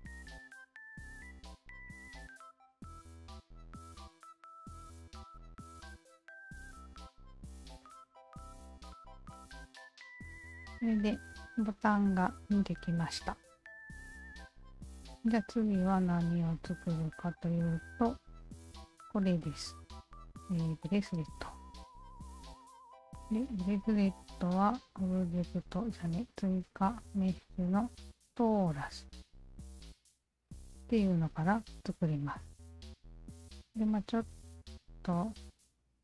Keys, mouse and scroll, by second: 1.3 alt+click, 2.9 e, 3.9-5.5 alt+drag, 6.0 alt+click, 6.3 alt+right click, 6.6-7.6 alt+drag, 7.8 alt+drag, 8.4 alt+click, 9.0 alt+right drag, 9.3-9.7 alt+drag, 9.9-10.3 alt+middle drag, 10.3 alt+click, 12.0 alt+click, 12.9 alt+click, 13.3 alt+click, 13.8 alt+right drag, 14.2-16.0 alt+drag, 17.1 alt+click, 22.6 alt+click, 24.8 alt+click, 26.5 alt+click, 29.2 alt+click, 34.8 q.